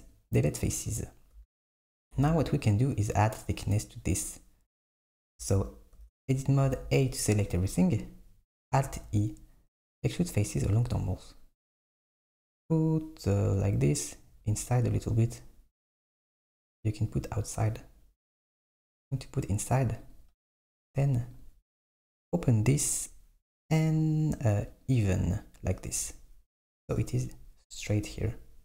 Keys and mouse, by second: 1.4 Tab, 2.2 Tab, 5.3 Tab, 6.0 Tab, 6.6 a, 8.9 alt+e, 21.4-24.4 drag, 24.8 click.